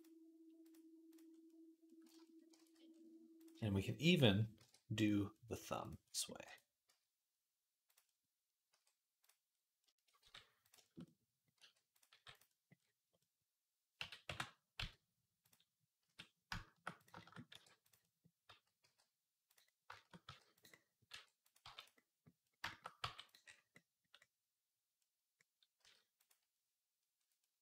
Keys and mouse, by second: 2.5 ctrl+s, 4.4 alt+d, 4.8-27.6 middle drag, 5.5 g, 6.2 r, 8.5 r, 10.0 g, 11.4 r, 11.9 g, 13.8 s, 15.8 s, 17.3 r, 18.6 g, 20.0 g, 20.9 r, 21.4 g, 22.8 g, 25.6 s, 27.5 g.